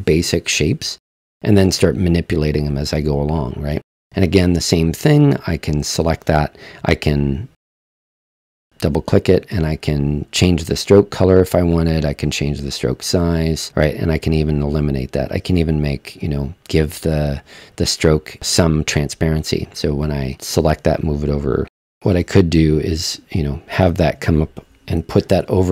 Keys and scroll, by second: 25.2 super+z.